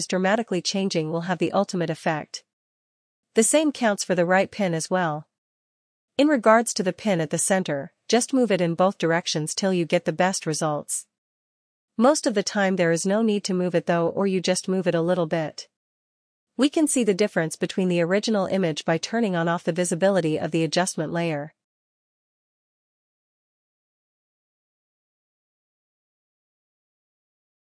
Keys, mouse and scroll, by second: 2.0 click, 7.8 click, 9.7 click, 11.6 click, 12.8 click, 19.0 click, 24.3 click, 27.1 click.